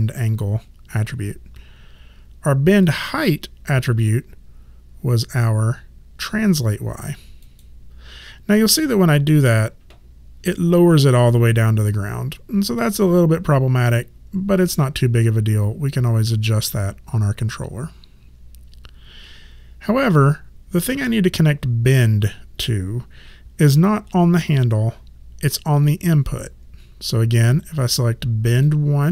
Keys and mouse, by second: 2.9 click, 7.4 click, 28.5 click.